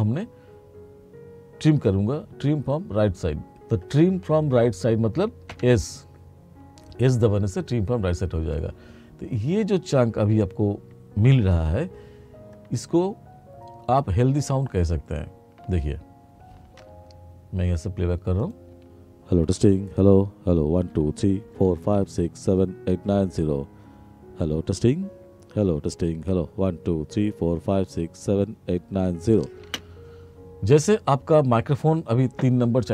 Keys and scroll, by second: 5.6 s, 15.7 space, 18.8 space, 29.7 space.